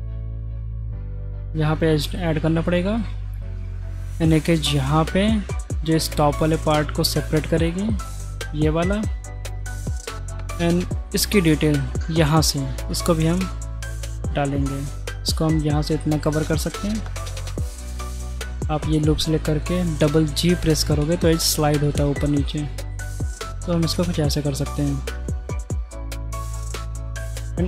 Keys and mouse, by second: 1.0-2.2 middle drag, 2.8 shift+middle click, 3.8 ctrl+r, 7.7 middle click, 9.7 click, 12.8 click, 13.3 ctrl+r, 17.0 click, 20.0 middle click, 20.9 g, 24.1 middle click, 26.8 middle click.